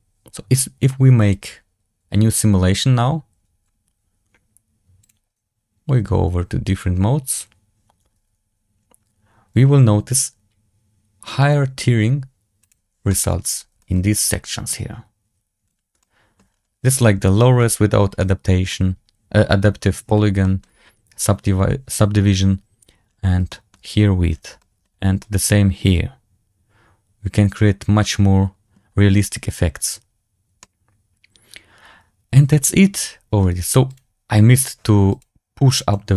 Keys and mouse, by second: 13.0 shift+middle drag, 13.7 shift+middle drag, 14.2-14.6 middle drag, 15.9-16.3 shift+middle drag, 18.1-18.5 middle drag, 20.3 shift+drag, 23.4 shift+drag, 24.5 shift+drag, 25.1-26.1 drag, 26.1-28.6 middle drag, 30.5-33.3 middle drag, 35.1-35.4 drag, 35.9 click.